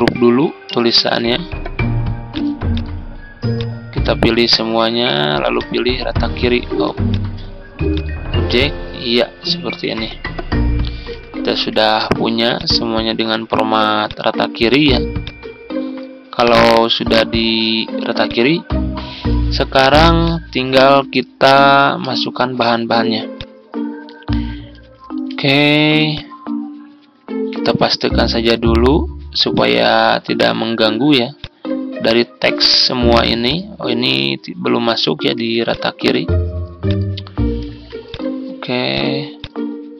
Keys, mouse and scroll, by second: 0.8 ctrl+g, 2.2-4.7 drag, 6.5 ctrl+z, 7.0-24.6 drag, 25.2 ctrl+c, 26.0 click, 27.4 ctrl+v, 29.4-32.6 drag, 32.7 click, 35.5 shift+click, 36.8 click, 37.6 ctrl+z, 38.0 click.